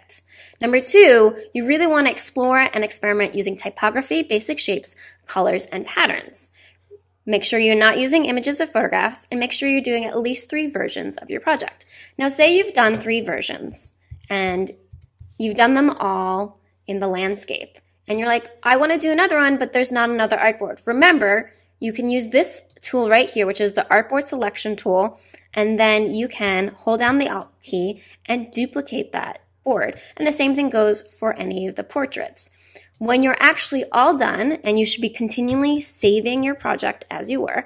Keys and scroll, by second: 13.7 super+-, 36.3 super+s.